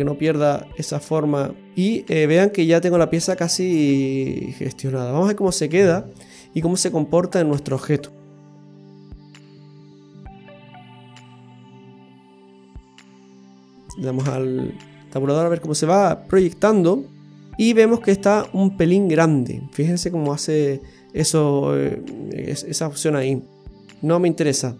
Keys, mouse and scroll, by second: 6.0-6.3 scroll down 1, 7.2 scroll down 2, 9.9 a, 11.0 Tab, 13.3 right click, 14.9-16.4 scroll down 3, 15.4 middle click, 17.7-19.8 scroll up 7, 22.0 middle click.